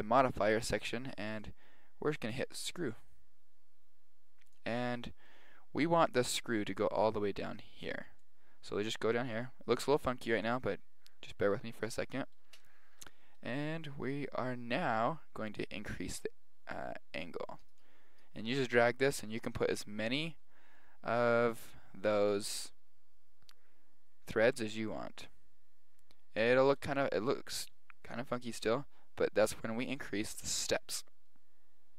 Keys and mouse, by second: 1.4 click, 4.8-8.1 middle drag, 8.2-10.0 drag, 12.6-14.4 middle drag, 15.5 click, 30.0-31.8 drag.